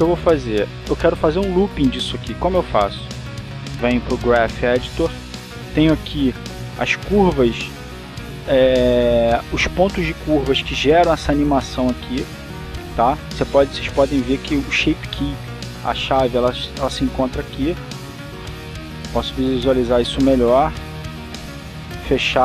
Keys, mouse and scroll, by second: 4.1 click, 5.4-7.5 drag, 7.5 a, 17.6 click, 19.6 click, 21.3-22.4 drag.